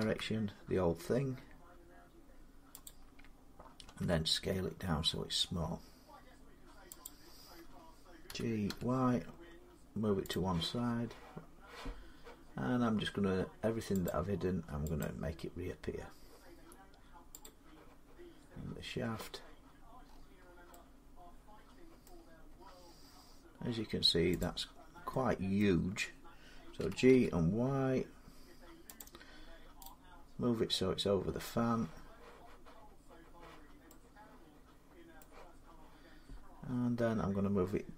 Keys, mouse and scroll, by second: 2.7-4.9 drag, 3.7 s, 6.9 click, 8.1-8.5 typing, 8.7-12.0 drag, 13.9 click, 14.8 click, 16.3 middle click, 16.3 middle click, 17.3 click, 17.9-18.5 scroll down 2, 18.5-18.9 scroll down 3, 19.4-20.4 scroll up 11, 20.4 scroll, 21.8-22.4 scroll, 22.4 scroll down 11, 22.7-23.2 scroll down 4, 24.2 click, 24.7 scroll up 15, 25.4 middle click, 26.6-26.9 typing, 27.5 scroll, 29.7 click, 30.6-31.8 scroll, 35.0 middle click.